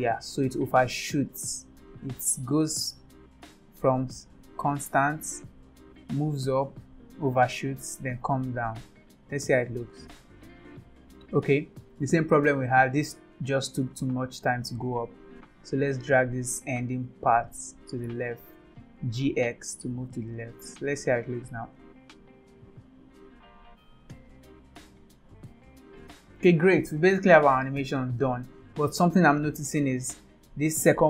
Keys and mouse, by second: 2.4-9.6 drag, 9.8 space, 11.8 click, 12.8 click, 12.9 space, 13.6 click, 13.8 space, 14.8 space, 15.5 click, 17.0 g, 21.3 click, 21.6 space, 22.8 click, 24.1 click, 25.3 click, 26.4 space, 30.4 click.